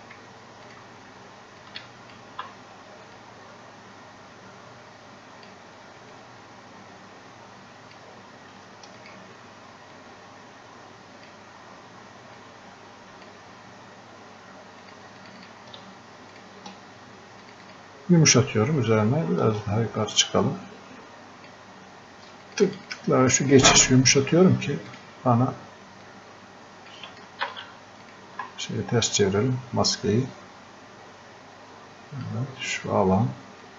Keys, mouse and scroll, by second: 20.1 ctrl+click, 27.5 ctrl+z, 28.0 ctrl+click, 29.2 click.